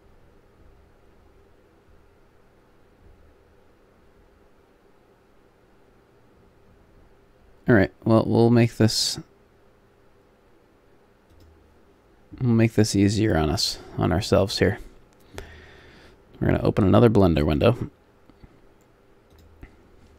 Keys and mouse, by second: 13.4-16.0 drag.